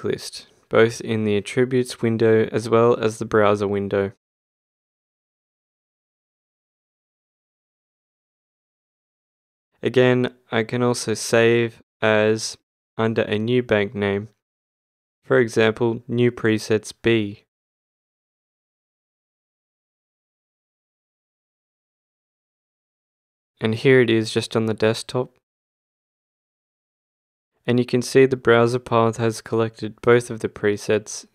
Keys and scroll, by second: 15.7 space, 16.1 shift+b, 20.9 Return.